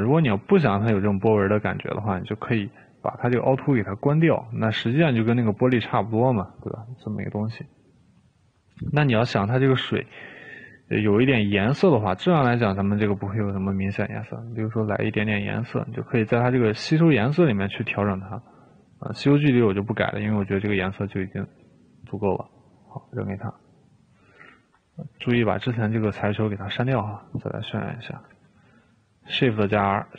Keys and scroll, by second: 25.4 Delete, 25.8 Delete, 28.5 r.